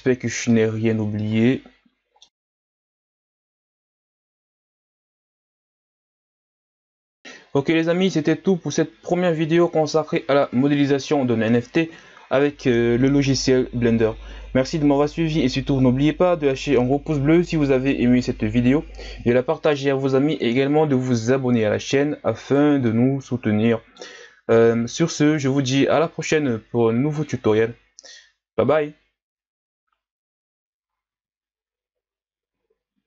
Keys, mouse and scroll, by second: 0.5-2.3 middle drag, 2.3 KP_1, 2.3 scroll up 1, 2.5 right click, 2.7 scroll down 2, 3.1 scroll up 6, 3.2 scroll down 1, 3.4 right click, 3.6 ctrl+z, 3.7 Tab, 3.8 ctrl+z, 4.0-4.8 scroll down 8, 4.1 Tab, 4.3 Tab, 4.4 right click, 4.5 Tab, 4.6 click, 4.7 Tab, 4.8 scroll up 1, 4.9 right click, 5.0 right click, 5.1 Tab, 5.2 scroll down 1, 5.4 KP_1, 5.5 scroll up 2, 5.6 ctrl+z, 5.7 Tab, 5.8 Tab, 6.1 middle click, 6.2 Tab, 6.3 right click, 6.4 middle click, 6.4 click, 6.6 KP_1, 6.7 a, 6.8 scroll down 3, 6.9 scroll up 5, 7.0 scroll down 2, 7.1-9.6 scroll up 1, 10.5 ctrl+s, 21.6-21.9 scroll up 5, 22.4-22.9 right drag, 22.9-24.6 middle drag, 24.6 KP_1, 25.7-27.7 scroll down 3, 27.7-28.2 scroll down 4, 28.2 a.